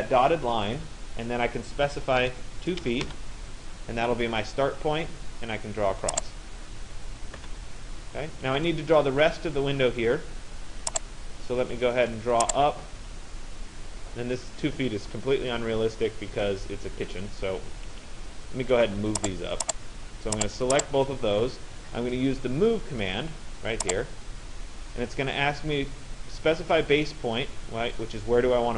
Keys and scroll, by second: 1.8 2, 3.1 Return, 7.0 Return, 17.6 Escape.